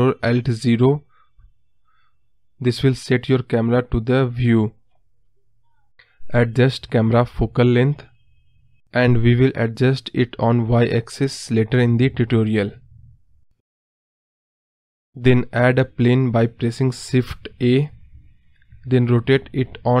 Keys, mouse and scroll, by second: 1.3 click, 2.7 ctrl+alt+KP_0, 7.7-11.6 drag.